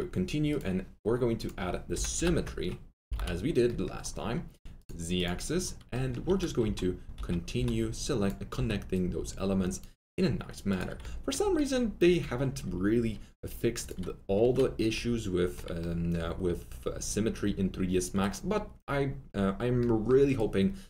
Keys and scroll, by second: 1.7-3.6 typing, 6.9-8.5 typing.